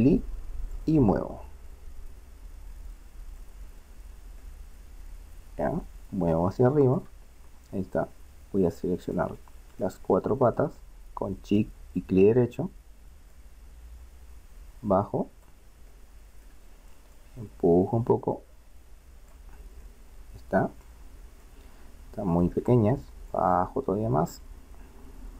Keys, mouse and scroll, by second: 4.8-6.4 middle drag, 9.1-13.3 right drag, 13.3-15.2 drag, 15.9-17.2 middle drag, 17.2-18.8 drag, 19.9-23.3 middle drag, 23.3-25.0 drag.